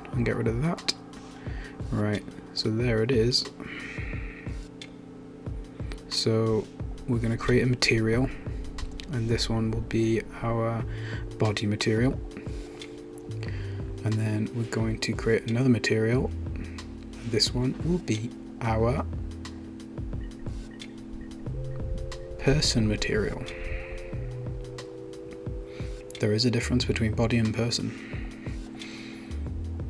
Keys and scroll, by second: 10.3-13.6 typing, 21.1-24.3 typing.